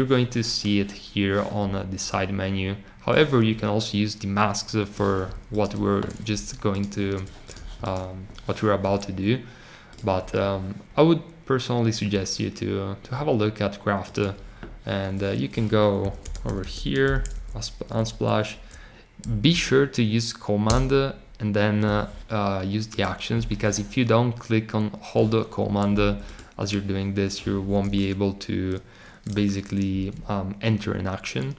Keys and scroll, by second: 15.7-17.5 typing.